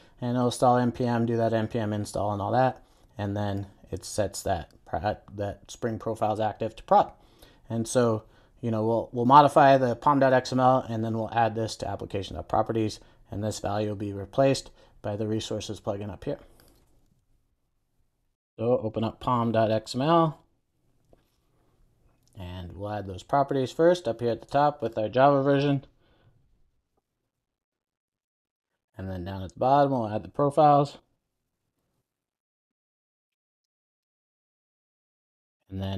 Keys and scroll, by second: 18.5 shift+super+o, 27.8 Return, 28.9 super+s, 32.8 Return, 35.2 super+s.